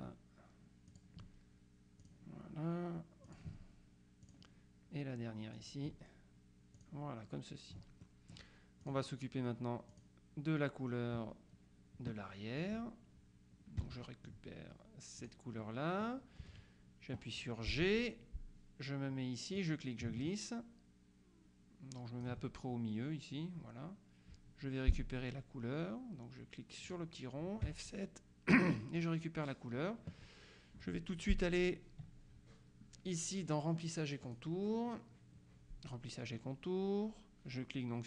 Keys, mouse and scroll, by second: 1.0 click, 2.1 click, 3.4 click, 4.3 click, 5.6 click, 6.8 click, 8.1 middle click, 8.9 click, 10.0 click, 13.9 F7, 14.1 middle click, 15.3 click, 17.8 g, 19.6-22.8 drag, 27.0 click, 27.7 F7, 29.1 click, 34.3 click.